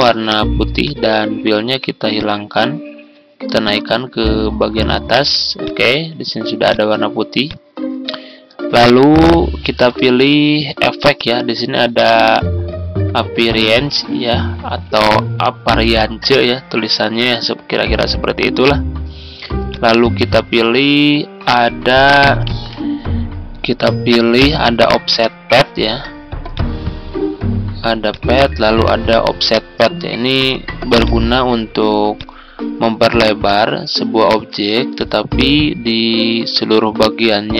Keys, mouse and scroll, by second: 4.4-37.5 drag.